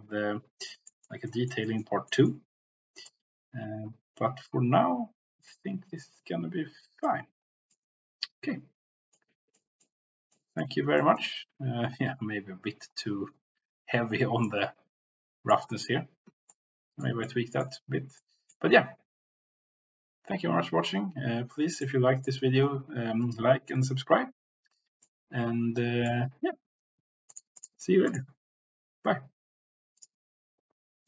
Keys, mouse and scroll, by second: 0.9 middle click, 1.6 middle click, 2.1 middle click, 3.1-7.1 drag, 7.7-9.4 drag, 10.3 click, 11.1 shift+click, 14.6 click, 16.5 shift+click, 17.2 click, 18.1 click, 21.8 click, 25.0-26.1 drag, 27.2 click, 27.6-28.4 drag.